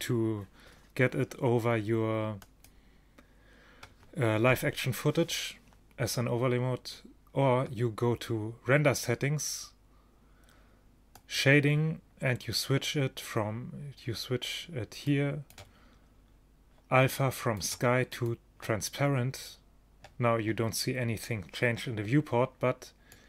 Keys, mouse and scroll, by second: 0.0 Escape, 2.5 click, 8.2-11.3 middle drag, 11.3-13.1 drag, 15.1-17.0 drag, 17.5-19.3 drag, 23.2 click.